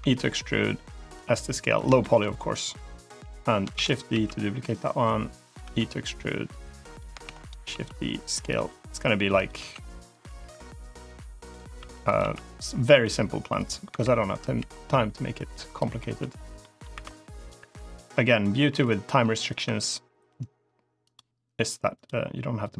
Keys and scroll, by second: 1.1 s, 3.6 shift+d, 4.0 s, 5.5 e, 7.1 shift+d, 7.5 s, 8.4 e, 9.4 s, 10.1 e, 11.6 e, 12.0 s, 13.7 l, 14.4 g, 18.6 i, 19.5 e.